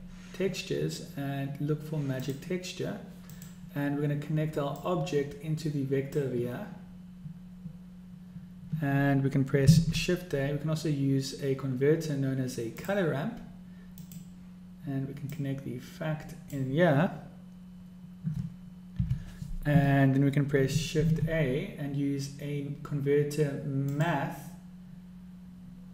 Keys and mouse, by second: 5.3-6.6 drag, 10.3 shift+a, 15.7-16.9 drag, 21.6 shift+a.